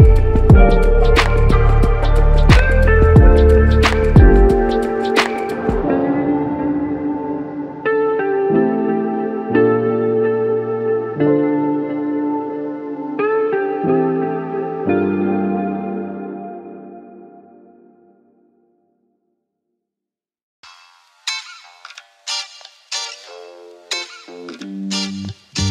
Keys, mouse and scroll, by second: 13.6 typing, 14.2 Return, 23.0 f, 24.0 double click, 25.5 ctrl+alt+click.